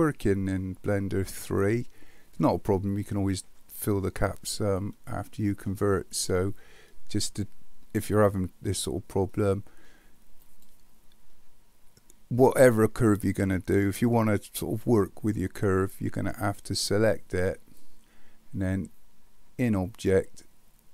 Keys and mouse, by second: 0.5-3.1 middle drag, 5.0-5.7 middle drag, 10.4 click, 19.8-20.9 drag.